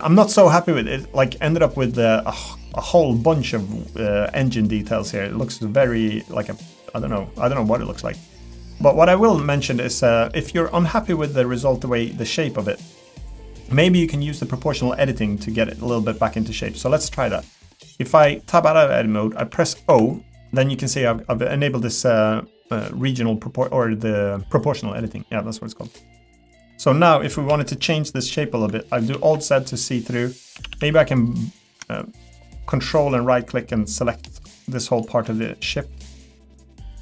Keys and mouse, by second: 0.3 middle click, 1.6 middle click, 2.7 middle click, 4.4 middle click, 5.2 middle click, 6.1 middle click, 6.8 middle click, 7.5 middle click, 8.0 middle click, 9.4 Tab, 10.3 middle click, 12.1 middle click, 12.6 middle click, 18.1 Tab, 19.4 o, 25.8 middle click, 26.7 Tab, 27.5 KP_1, 29.1 alt+z, 30.5 a, 32.1-35.2 ctrl+right drag, 36.5 middle click.